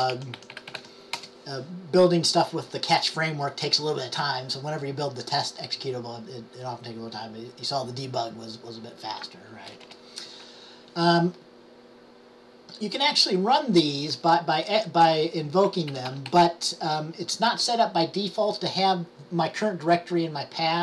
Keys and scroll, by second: 0.0-1.4 typing, 15.6-16.9 typing.